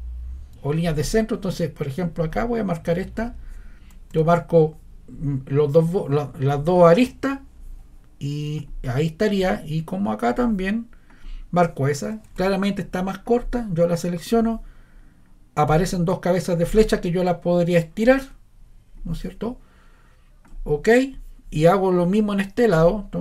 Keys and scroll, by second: 12.3 Escape.